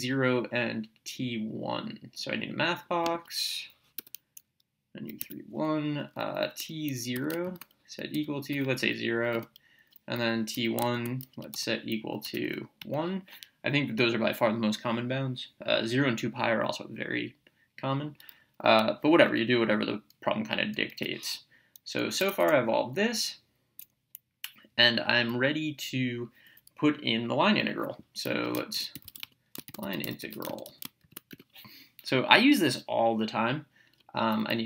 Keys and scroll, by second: 3.1 Menu, 4.0 3, 5.2 1, 6.4 t, 7.1 0, 8.1 =, 8.5 0, 9.3 Return, 10.2 t, 10.5 1, 11.5 =, 12.2 1, 12.8 Return, 20.9 BackSpace, 22.1 Up, 25.3 Down, 28.9-31.2 typing, 31.3 Return.